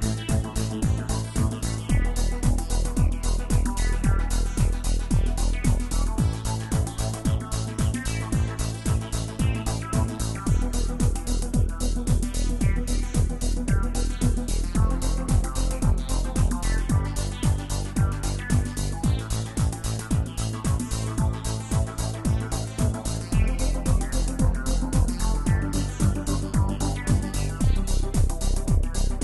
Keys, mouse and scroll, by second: 0.5 click, 1.5 space, 4.9 space, 5.2 click, 7.8 click, 9.2-12.2 drag, 15.9 click, 22.2 scroll down 2, 24.3-25.5 scroll down 4, 25.5-29.2 drag.